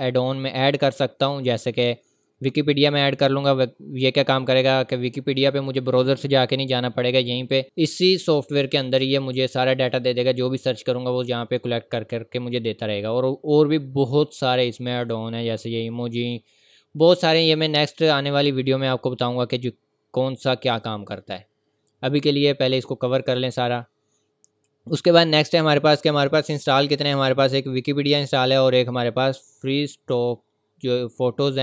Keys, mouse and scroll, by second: 0.4 scroll down 1, 1.5-3.9 scroll up 1, 12.6-14.8 scroll down 1, 19.3-19.8 scroll up 1, 22.6 click, 25.4 click.